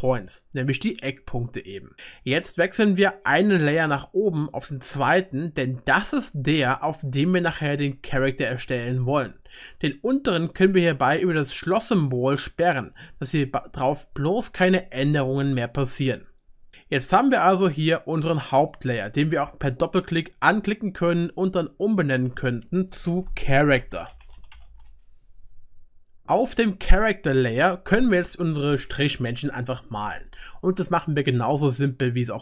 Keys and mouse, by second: 5.0 click, 6.3-11.1 right drag, 11.1 click, 12.3 click, 12.4 right click, 16.7 click, 16.7 middle click, 18.4 click, 19.7 click, 23.7-32.4 drag, 23.7-32.4 middle drag, 23.7-32.4 right drag.